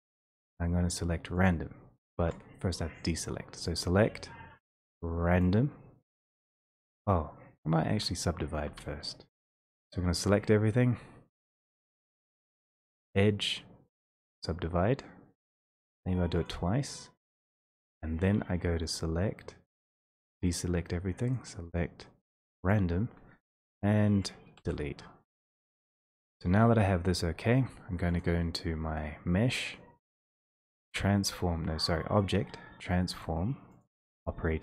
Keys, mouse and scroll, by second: 3.7 click, 5.7 click, 7.8-9.7 typing, 13.2 click, 16.7 click, 18.9 click, 20.3 alt+a, 21.4 click, 24.6 Delete, 26.2 a, 28.2 click, 29.0 click, 32.3 click.